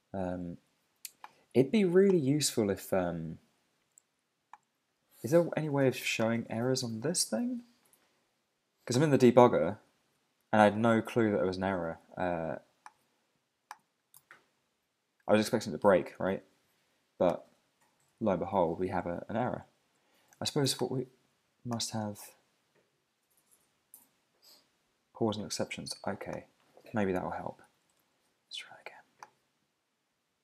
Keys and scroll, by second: 9.9 super+`, 10.7 super+Tab, 14.1 super+`, 27.6 super+`, 27.9 super+Tab.